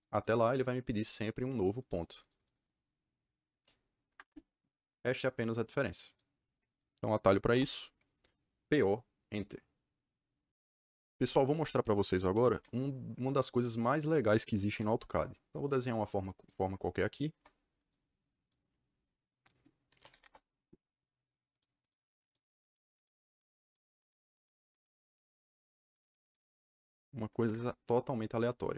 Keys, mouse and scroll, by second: 0.2 click, 0.5 click, 0.8 click, 1.1 click, 1.5 click, 1.7 click, 2.0 click, 2.1 click, 2.3 click, 2.4 click, 4.0 Escape, 6.0 click, 6.6 click, 7.5 Delete, 11.4 click, 12.3 c, 12.5 KP_Enter, 13.4 click, 14.0 click, 14.7 Return, 15.6 click, 16.3 click, 17.2 Return, 17.7 click, 18.3 click, 19.6-20.5 typing, 21.5 click, 21.7 click, 22.1 click, 22.5 click, 22.9 click, 23.2 click, 23.5 click, 23.9 click, 24.3 click, 24.6 click, 24.9 click, 25.2 click, 26.0 click, 26.2 click, 27.3 c.